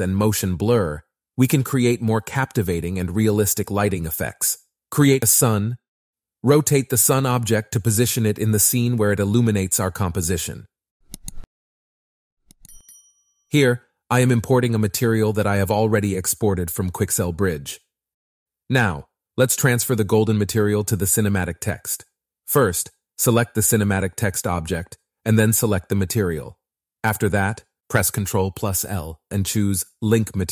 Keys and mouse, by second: 0.3 click, 0.7 z, 5.6 shift+a, 6.1 r, 8.9 click, 11.3 r, 12.7 click, 14.2 click, 16.5 ctrl+shift+v, 16.7 shift+s, 18.0 s, 20.1 g, 22.2 shift+click, 23.0 shift+click, 23.6 shift+click, 24.8 shift+click, 25.8 shift+click, 26.7 shift+click, 27.6 shift+click, 28.4 shift+click, 29.3 typing, 29.5 ctrl+l.